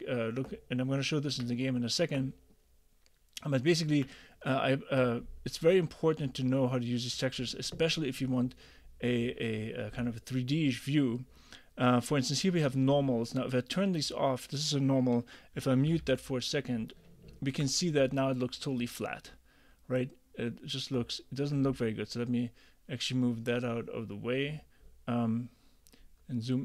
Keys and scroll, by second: 16.0 m.